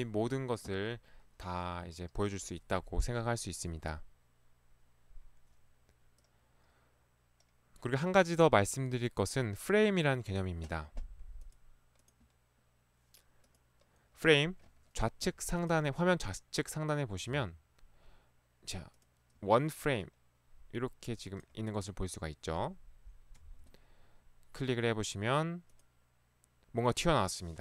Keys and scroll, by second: 23.3 Escape, 23.5 ctrl+1.